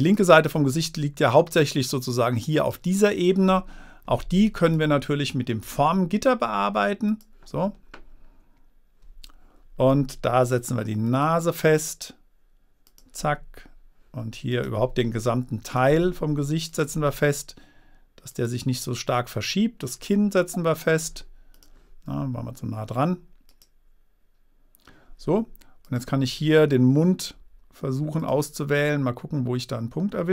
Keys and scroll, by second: 27.7 Return.